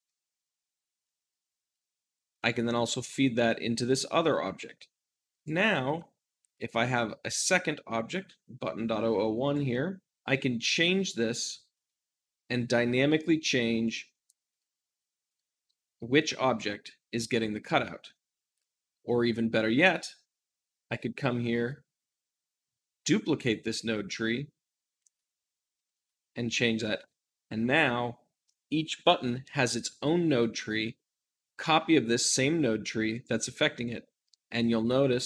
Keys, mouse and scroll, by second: 1.6-5.7 drag, 5.7 shift+d, 5.8 middle click, 6.4-26.9 drag, 26.9-33.0 middle drag, 29.4-33.0 scroll up 1, 33.0 click, 33.5 r, 34.4 right click, 34.7 `.